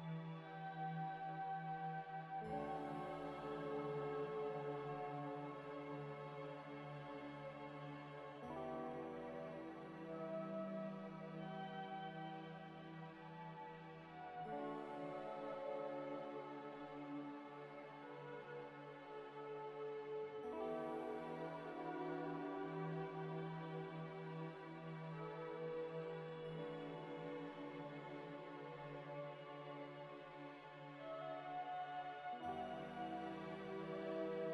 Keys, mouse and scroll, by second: 0.2 scroll down 1, 0.6 a, 1.1 u, 2.5 s, 3.2 ctrl+z, 3.5 s, 4.8 Tab, 6.6 Tab, 6.7 shift+click, 7.8 double click, 12.0 shift+click, 12.5 Tab, 12.7-15.7 typing, 17.0 Tab, 17.6 Escape, 17.8 Tab, 18.2 middle click, 20.7 ctrl+z, 21.6 scroll up 1, 21.9 middle click, 22.4 Tab, 22.7 Tab, 24.6 double click, 24.9-25.4 scroll down 2, 25.2 middle click, 25.6 scroll up 1, 26.4 double click, 27.1-29.1 typing.